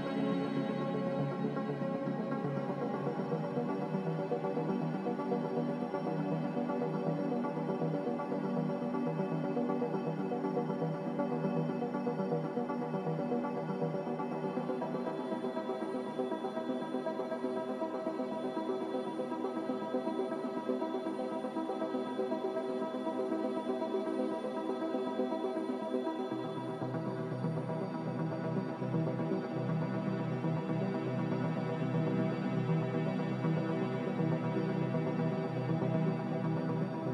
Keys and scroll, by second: 0.0 ctrl+z, 3.0 ctrl+z, 8.5 ctrl+z, 12.6 Return.